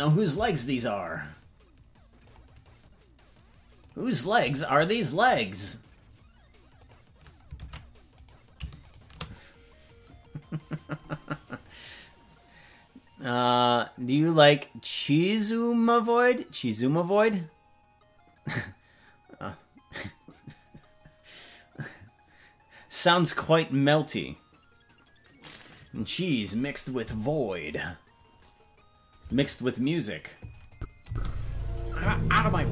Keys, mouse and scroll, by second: 6.8 click, 7.6 ctrl+Tab, 8.3 right click, 8.9-12.7 shift+right drag, 30.7 click, 31.0 space.